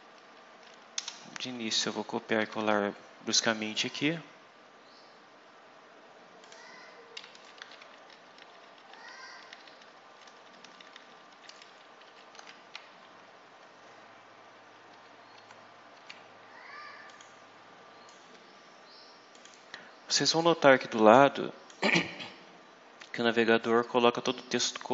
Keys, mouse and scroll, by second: 1.7 ctrl+v, 3.6-4.0 scroll up 2, 4.1-4.9 scroll up 4, 6.3 click, 7.2 Down, 7.5 Home, 7.9 shift+Down, 12.0 shift+Up, 12.3 shift+End, 13.1-13.8 scroll up 4, 14.8 Tab, 17.0 click, 18.0 click, 19.2 click, 20.6-21.8 drag, 23.5-24.9 drag.